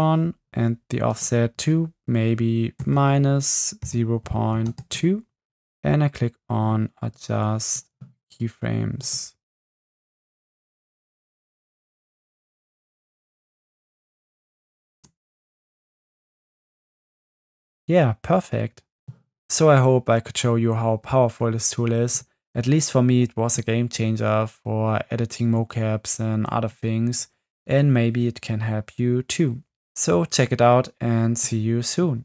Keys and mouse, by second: 1.1-4.9 drag, 7.2 click, 9.1 click, 10.8-12.0 drag, 12.7 click, 13.3 click, 14.9 space, 16.4 space.